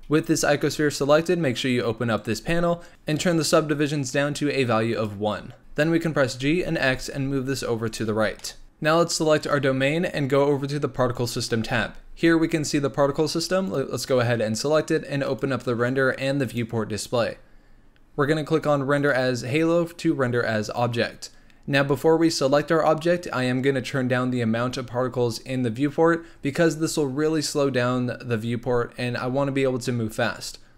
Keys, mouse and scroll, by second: 2.1 click, 2.9 click, 4.9 click, 5.6 g, 6.3 g, 8.3 shift+middle drag, 9.4 click, 11.1 click, 13.7 click, 15.2 click, 16.4 click, 18.9-23.0 drag.